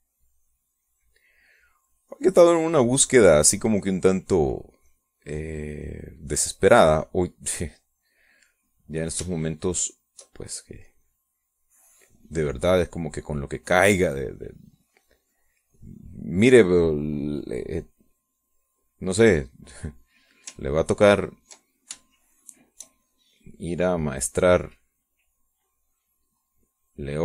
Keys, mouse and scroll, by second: 11.4-17.6 shift+drag, 20.2-21.2 middle drag, 22.0 ctrl+click, 23.1 shift+click, 24.0 shift+middle click, 25.0-26.6 drag, 26.7-27.2 drag.